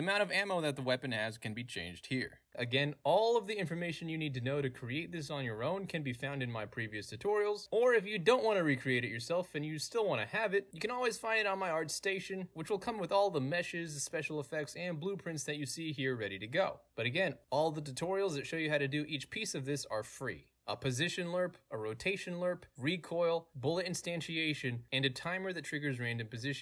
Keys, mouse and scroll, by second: 0.1 click, 1.3 click, 2.5 middle click, 2.5-3.0 scroll up 2, 3.0 scroll up 1, 3.0 scroll down 2, 4.7 middle click, 4.7-5.3 scroll down 2, 5.9 middle click, 5.9-6.3 scroll down 2, 6.8 middle click, 6.8 scroll down 2, 10.9-11.5 scroll up 1, 11.8 click, 12.1 click, 12.3 click, 12.4 click, 12.6 click, 13.0 click, 13.3 click, 13.8 drag, 14.3 click, 14.6 click, 14.7 click, 14.8 drag, 15.0 click, 15.3 drag, 15.4 click, 15.5 drag, 16.1 drag, 16.7 click, 16.8 scroll up 2, 17.0-19.2 drag, 19.5 click, 24.3 click.